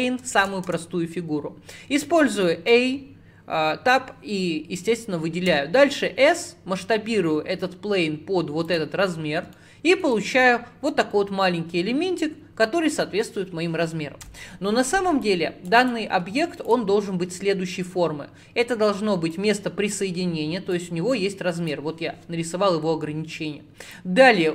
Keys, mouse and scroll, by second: 0.7 Tab, 1.2-2.1 scroll down 1, 2.1-4.2 scroll down 3, 5.6 s, 9.1-9.6 scroll up 5, 9.6-12.7 shift+middle drag.